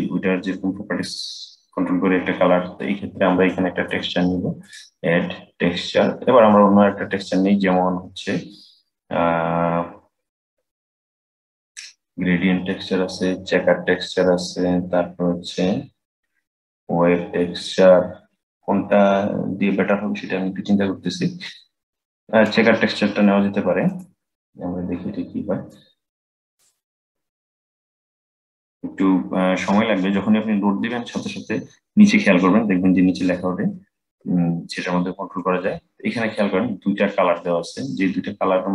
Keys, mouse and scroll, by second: 3.2-4.3 middle drag, 4.3-7.5 drag, 25.4-32.1 drag, 35.1-38.1 middle drag, 38.6-38.7 middle drag.